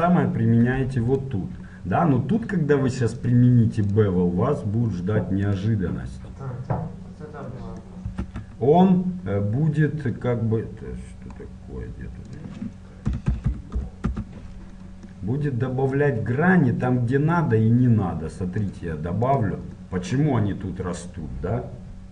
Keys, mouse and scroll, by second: 1.3-5.7 right drag, 5.7-7.7 drag, 8.3 z, 8.9-14.2 middle drag, 14.2 KP_0, 19.5-22.1 drag.